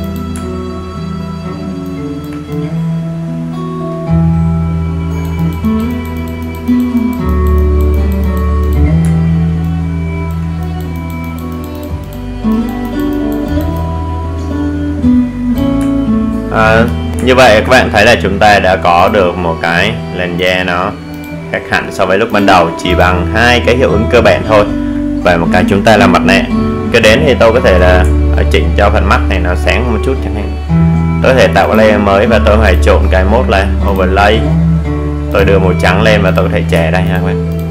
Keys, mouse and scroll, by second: 2.3-2.8 alt+scroll down 1, 3.2-3.6 alt+scroll up 1, 3.6 alt+right click, 4.3-11.2 drag, 11.2-11.8 scroll up 2, 11.8 alt+right click, 12.7-18.6 drag, 18.6 alt+scroll down 1, 20.1 scroll down 1, 21.4 click, 29.1-29.7 alt+scroll up 1, 30.7 alt+scroll down 1, 32.5 click, 33.6 click.